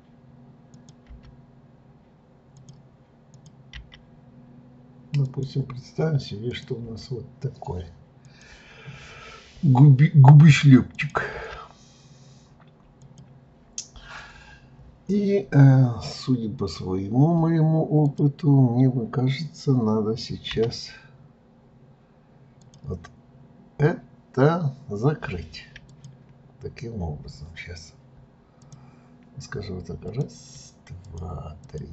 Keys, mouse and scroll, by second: 0.7 click, 1.1 g, 3.3 click, 3.7 g, 6.5 click, 6.8 g, 10.9 click, 11.3 g, 18.0 click, 20.5 g, 25.9 click, 28.6 click, 30.0 click, 31.0 shift+click, 31.6 shift+click.